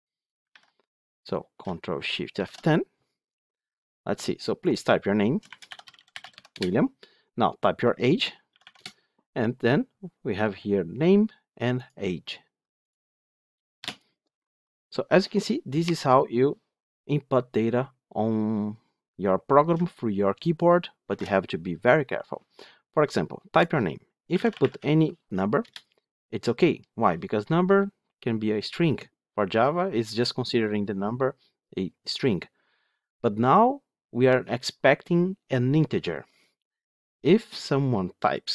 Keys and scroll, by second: 0.3 ctrl+v, 2.2 ctrl+shift+F10, 20.9 ctrl+shift+F10.